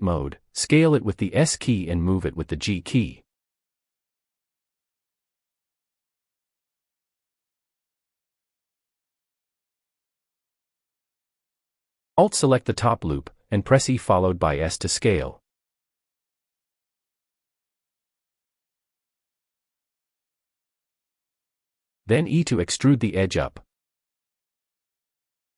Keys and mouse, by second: 0.6 Escape, 1.0 g, 1.1 z, 2.0 s, 3.7 click, 4.7 shift+click, 5.6-7.8 typing, 7.5 click, 12.8 alt+click, 15.4 e, 16.3 s, 19.6 shift+middle click, 20.6 e.